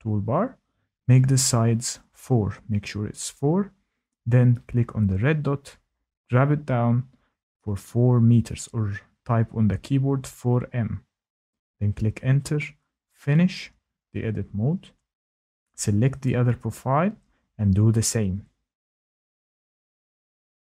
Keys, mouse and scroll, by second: 2.0 click, 6.1 click, 10.6 typing, 11.4 Return, 13.6 click, 16.9 click, 19.6 click.